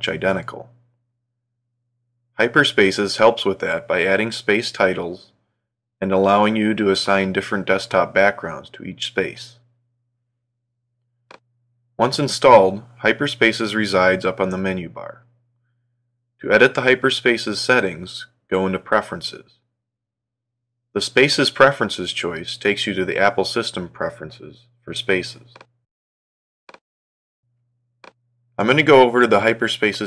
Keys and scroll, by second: 0.8 super+Up.